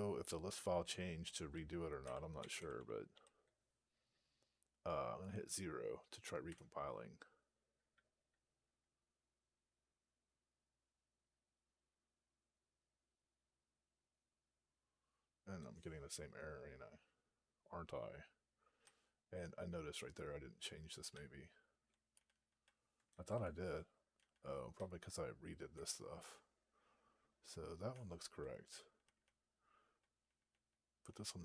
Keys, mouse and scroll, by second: 1.9 Up, 2.3 Left, 2.4 Left, 2.6 Left, 2.8 Left, 3.0 Left, 6.3 0, 18.7-19.9 Up, 21.0-21.7 Up, 22.0 Down, 22.2 Down, 22.4 Down, 24.5 Down, 25.4 Up, 28.3 Down, 29.6-30.9 Down.